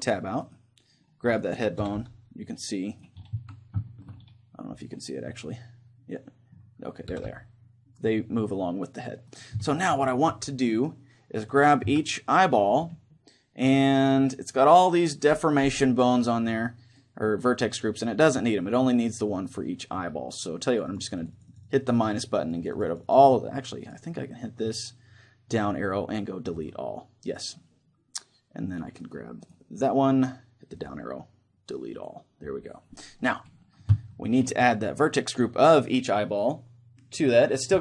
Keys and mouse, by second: 0.5-4.7 right drag, 1.9 r, 3.3 z, 4.0-7.2 middle drag, 7.2 r, 9.4-14.0 right drag, 9.7-11.5 middle drag, 11.9 z, 14.0-17.0 drag, 20.7-26.7 drag, 29.1-32.1 right drag, 30.8-32.9 drag, 34.1-36.7 middle drag.